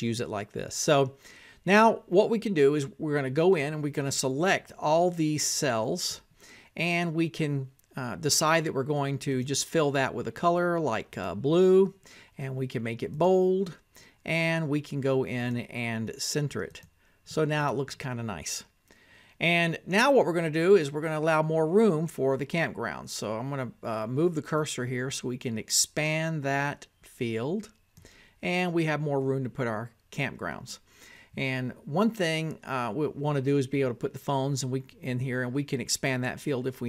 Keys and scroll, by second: 0.0-1.0 typing, 1.8 Tab, 3.6-6.9 typing, 7.7 Tab, 9.3-14.4 typing, 15.3 Tab.